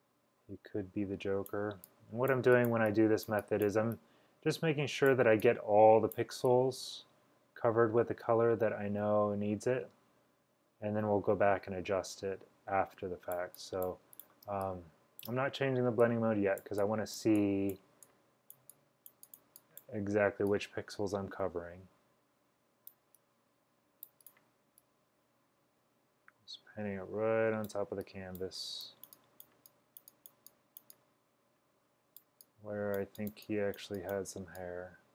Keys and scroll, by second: 14.3-15.3 typing.